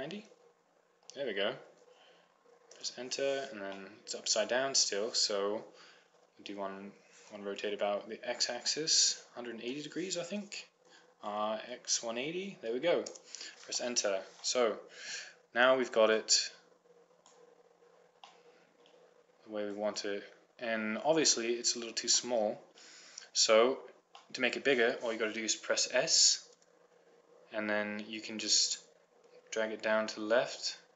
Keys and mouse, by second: 4.0-7.0 middle drag, 8.9 r, 14.1-17.2 middle drag, 17.2-18.4 drag, 18.6 middle click, 20.3-21.9 drag, 21.9 middle click, 22.1 click, 24.7-26.8 drag, 26.8 s.